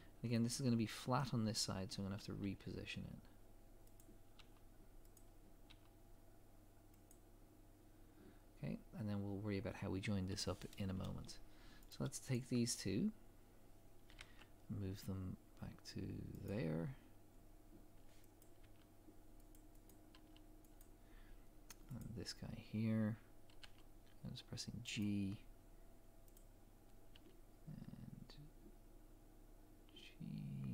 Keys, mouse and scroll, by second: 11.9 click, 12.3 shift+click, 14.1 g, 18.4 click, 18.6 g, 19.9 click, 20.2 g, 22.0 click, 23.6 g, 26.3 click, 27.2 g.